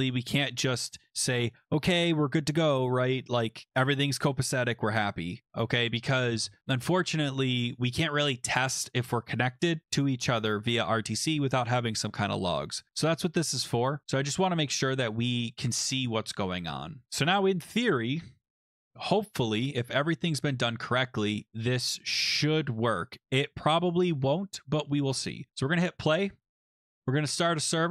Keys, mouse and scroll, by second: 13.5 click, 14.1 Return, 14.6 BackSpace, 15.1 Return, 17.0 click, 22.0 ctrl+s, 23.0 click, 23.6 ctrl+s, 25.5 click, 26.8 click, 27.3 click.